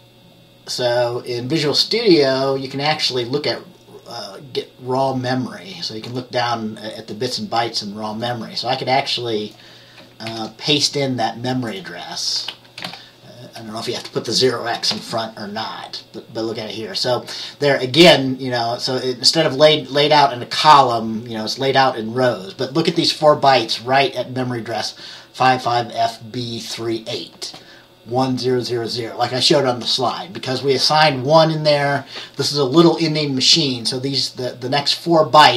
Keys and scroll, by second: 10.4 ctrl+v, 12.8-13.5 typing, 15.0 Return.